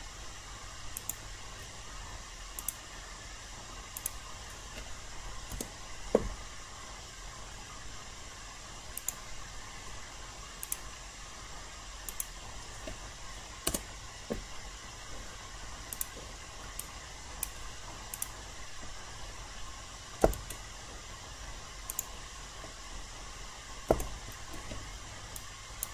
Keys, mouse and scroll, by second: 2.6 shift+click, 3.9 shift+click, 5.5 Return, 9.0 click, 10.6 shift+click, 12.0 shift+click, 13.6 Return, 15.9 click, 16.8 alt+click, 18.1 click, 20.2 BackSpace, 21.9 click, 23.8 BackSpace, 25.3 alt+right click.